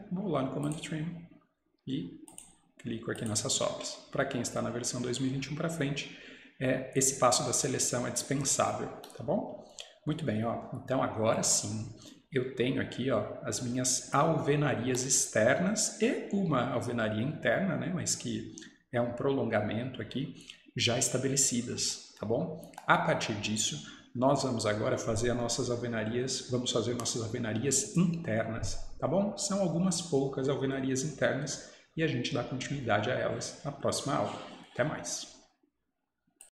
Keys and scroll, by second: 4.5 Escape, 4.7 Escape.